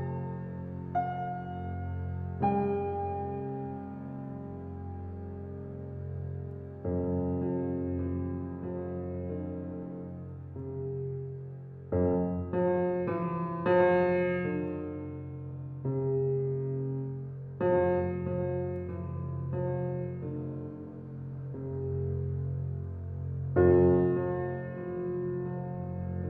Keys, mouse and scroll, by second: 0.3 click, 1.0 click, 1.6 click, 1.9-3.3 middle drag, 3.3 click, 3.8 click, 4.3 click, 4.6 middle click, 5.6 Tab, 5.8 scroll down 2, 6.1-6.4 middle drag, 6.4 scroll down 4, 6.8-11.4 middle drag, 11.4 scroll down 1, 11.6-12.0 middle drag, 12.0 click, 12.7-13.2 drag, 14.8 click, 16.4 click, 17.5 alt+middle click, 18.7 shift+middle drag, 18.9 scroll up 7, 19.9 click, 20.5 shift+click, 21.2 shift+click, 21.7 shift+click, 22.1 shift+click, 23.2 shift+click, 23.6 shift+click, 24.0 shift+click, 24.5 middle click, 25.3 shift+click, 25.6 shift+click, 25.9 shift+click.